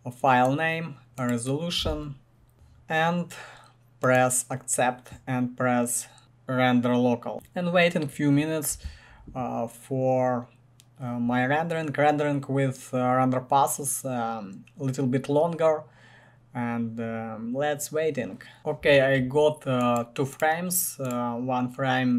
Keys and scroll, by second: 2.5 Tab, 2.5 Return, 2.5 typing.